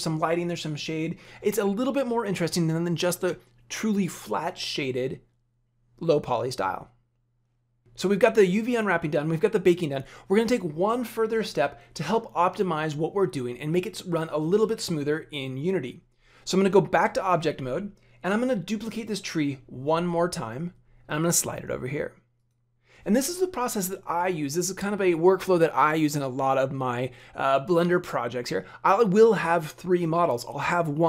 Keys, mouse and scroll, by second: 16.9 Tab, 19.9 shift+d.